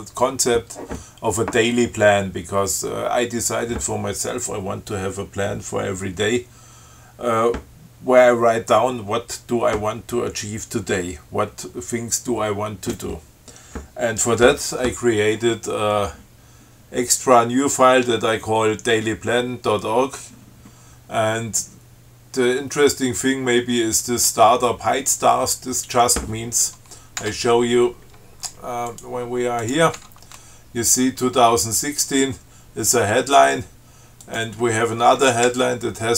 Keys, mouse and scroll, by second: 27.4 Tab, 29.1 click, 29.9 click, 30.2 Tab, 34.5 click, 35.7 Left.